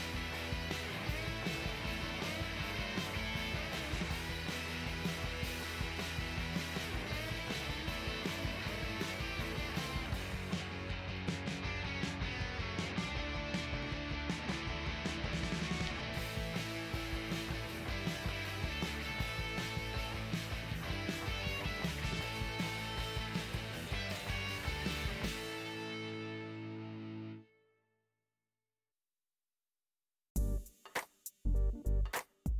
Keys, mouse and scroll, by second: 3.6 middle click, 5.4 f, 8.3 click, 8.5 ctrl+z, 8.7 click, 9.3 click, 10.3 click, 10.9 middle click, 11.4 click, 11.7 middle click, 12.1 click, 12.4 click, 12.7 click, 14.1 f, 17.9 f, 23.5 ctrl+z, 28.4 click, 29.1 f, 29.3 click, 30.2 click, 32.4 click.